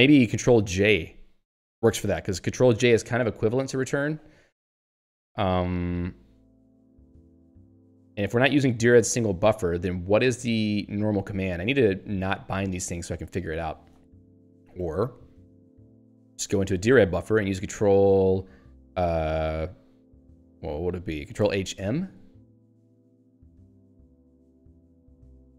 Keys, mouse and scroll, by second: 7.9 click, 12.0 Down, 12.2 Left, 14.6 ctrl+f, 16.0 ctrl+g, 16.6 super+e, 23.5-23.8 scroll down 3, 24.9 scroll up 1.